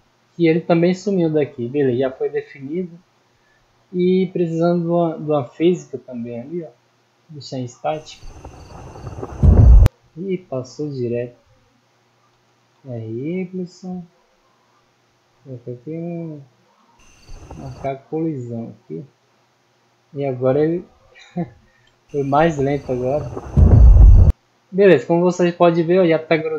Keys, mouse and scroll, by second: 0.3 click, 1.7-2.5 middle drag, 3.4-3.7 scroll up 2, 6.0 right click, 10.9 right click, 13.5 click, 14.4 right click, 14.9-15.5 middle drag, 15.5 click, 19.0 right click, 19.6 right click, 21.6 click, 25.2-26.3 middle drag.